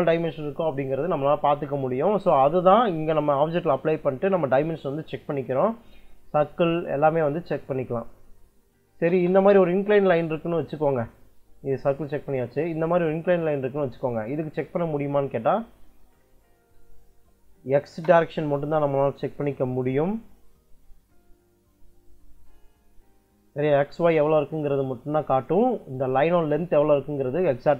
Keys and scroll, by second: 8.4 d, 8.8 i, 9.0 space, 12.9 Escape, 16.5 d, 17.0 i, 17.7 space.